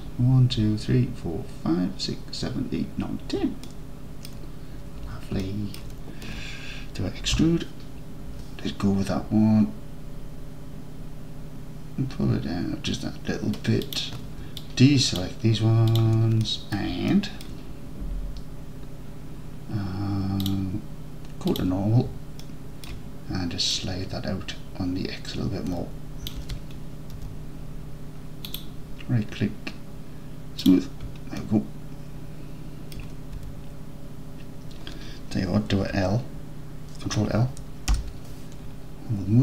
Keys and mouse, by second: 3.7-4.3 alt+drag, 5.4 alt+click, 7.4 e, 13.9 click, 14.6 ctrl+click, 16.0 ctrl+drag, 16.5-16.8 middle drag, 17.2-17.5 alt+drag, 20.6-22.0 drag, 22.5 alt+click, 23.8-26.3 drag, 26.4 alt+z, 27.2 Tab, 30.2 click, 31.4-33.0 alt+drag, 33.4 Tab, 38.0 ctrl+l.